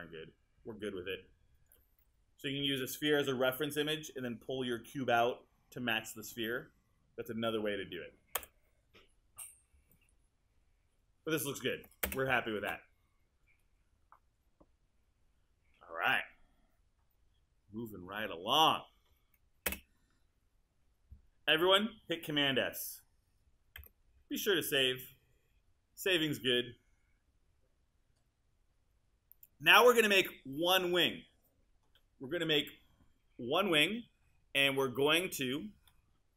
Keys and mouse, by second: 8.4 BackSpace, 12.1 space, 19.7 space, 23.8 super+s.